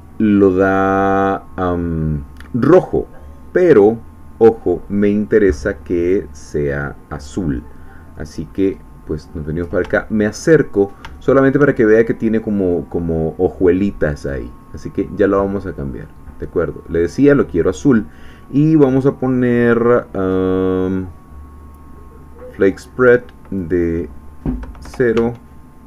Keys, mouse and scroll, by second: 6.0 click, 7.6 middle click, 8.5-8.9 scroll up 1, 9.3-9.8 scroll up 1, 10.0 shift+middle click, 10.6-11.0 shift+scroll down 1, 11.1 shift+click, 12.0 shift+scroll up 3, 14.2 click, 15.8-17.3 drag, 22.7-24.0 drag, 24.8 0, 25.2 Tab.